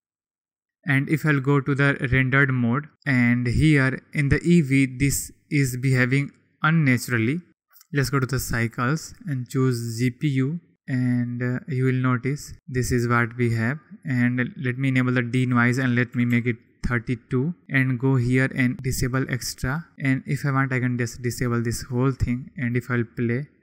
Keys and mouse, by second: 3.1 middle click, 8.3 click, 9.2-10.0 drag, 11.5 click, 13.4 click, 14.7 click, 15.4-16.5 drag, 17.9-20.4 drag, 20.8 click, 22.6 click.